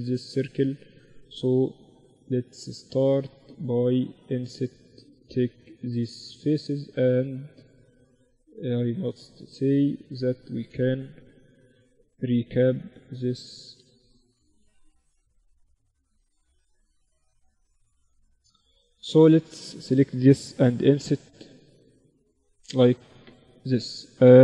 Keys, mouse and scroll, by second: 0.3 ctrl+r, 1.1 click, 1.3-3.3 middle drag, 2.0 z, 3.3-7.4 drag, 4.0-7.6 right drag, 6.1 z, 7.6-9.3 middle drag, 9.3-11.0 drag, 9.8-11.5 right drag, 10.1 a, 10.9 b, 12.0-13.3 right drag, 13.1 a, 13.3 click, 14.0 b, 18.1-20.3 drag, 18.5 z, 19.0-20.9 right drag, 20.3 i.